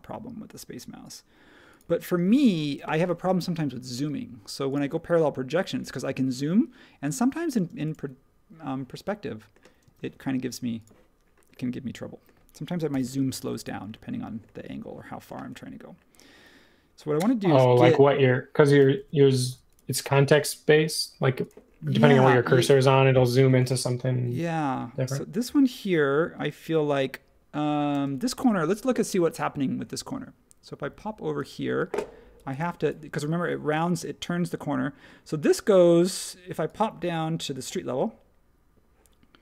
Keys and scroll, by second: 2.6 space, 7.6 space, 9.8 space, 12.9 l, 18.9 Escape, 20.7 Escape, 24.1 ⟲, 28.0 space.